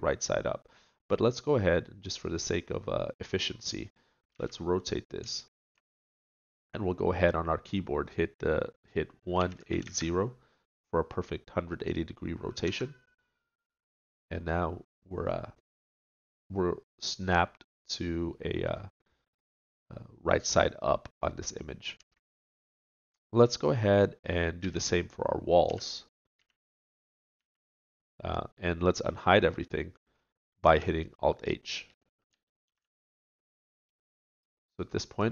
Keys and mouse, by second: 4.3 r, 15.5-17.0 middle drag, 24.6 KP_Decimal, 25.6 KP_5, 26.5 KP_1, 27.4 KP_5, 30.7 KP_5, 32.6 alt+h, 35.0 middle click.